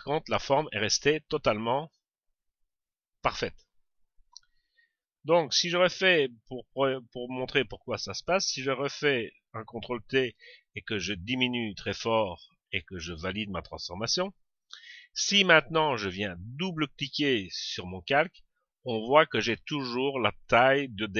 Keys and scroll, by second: 9.3 ctrl+t, 13.2 Return.